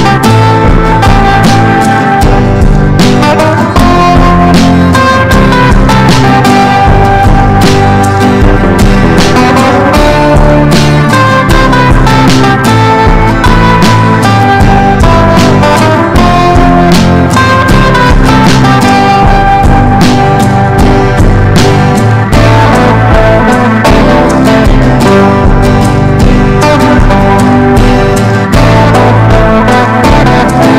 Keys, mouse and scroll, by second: 0.0-4.0 drag, 4.9 F4, 5.3 click, 6.7 ctrl+z, 7.0 ctrl+z, 7.5 click, 22.5-24.0 drag, 27.3 F4, 27.8-30.7 drag.